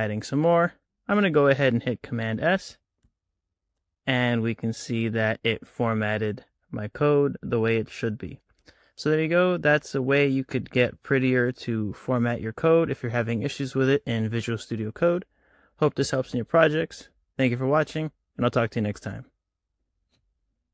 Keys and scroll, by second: 2.4 super+s.